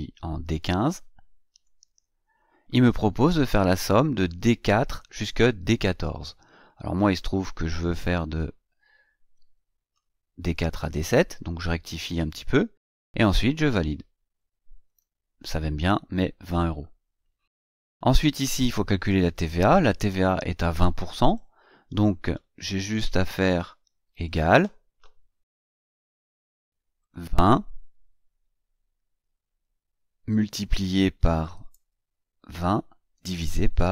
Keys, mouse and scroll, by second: 1.3 click, 7.6-9.9 drag, 14.7 click, 17.8 click, 23.9 click, 26.8 click, 30.0 KP_Multiply, 31.2 KP_2, 31.5 KP_0, 33.0 KP_Divide, 33.5 KP_1.